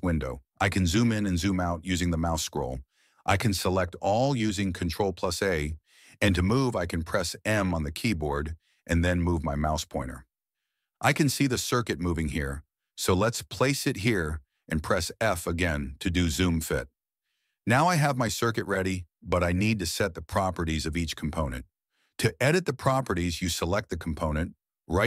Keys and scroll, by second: 2.6 ctrl+a, 4.9 m.